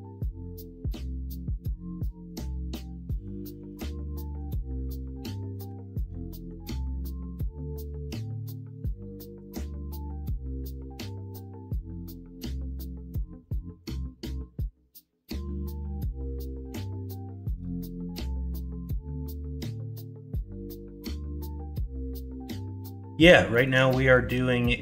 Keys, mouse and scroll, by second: 2.1 middle click, 2.5 alt+z, 2.9 middle click, 3.5 Tab, 4.2 middle drag, 5.3 middle drag, 5.6 /, 6.3 middle drag, 9.6 middle drag, 10.3-11.7 middle drag, 22.5 middle drag, 23.1 middle drag, 23.5 shift+middle drag, 23.9 middle drag.